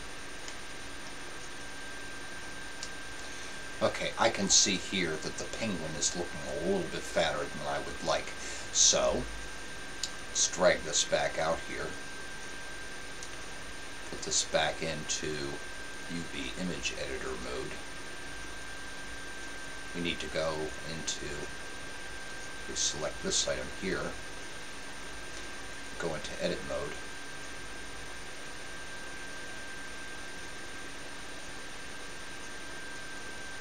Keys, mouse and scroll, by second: 0.5 KP_0, 2.6 KP_0, 10.1-11.8 drag, 11.9 click, 14.2-15.9 drag, 18.8-20.2 drag, 20.6-22.2 drag, 23.4 right click, 23.7-24.7 scroll up 1, 24.7-25.7 middle drag, 25.7-27.4 drag.